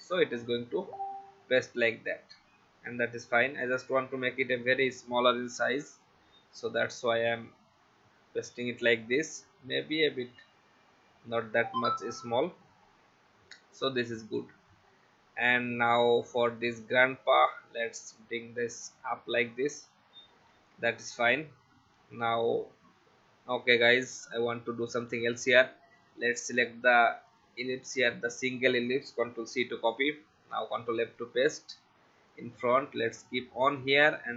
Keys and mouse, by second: 4.4 click, 7.0 click, 16.6 click, 17.3 Up, 24.2 click, 29.3 ctrl+c, 29.8 click, 30.7 ctrl+f, 32.3 alt+shift+click.